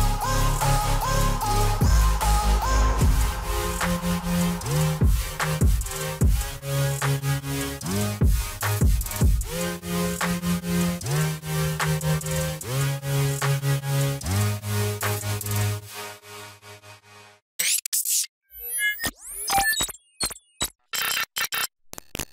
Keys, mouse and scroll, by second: 5.1 alt+scroll up 1, 5.4 click, 8.2 ctrl+z, 8.9 click, 10.5 ctrl+g, 11.3 shift+click, 15.6 scroll up 1, 15.8-16.1 scroll down 1, 16.1-17.4 scroll up 1.